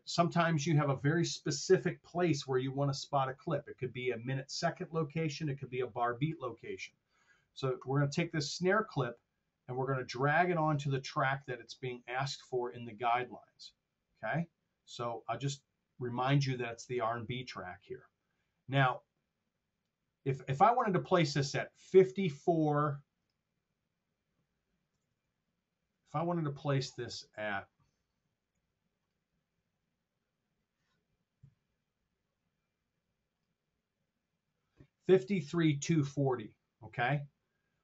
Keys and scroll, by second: 25.0 t, 27.3 F7.